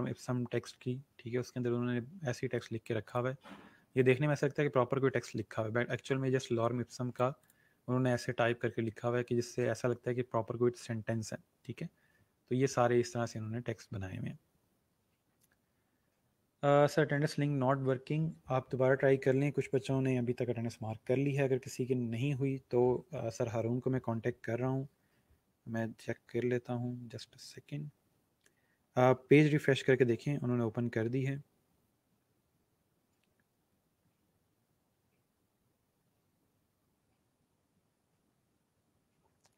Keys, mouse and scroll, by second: 1.5 scroll, 2.5 click, 3.5 scroll down 1, 4.4 scroll, 4.6 scroll up 1, 6.6 click, 12.4 scroll down 1, 13.5 scroll up 1.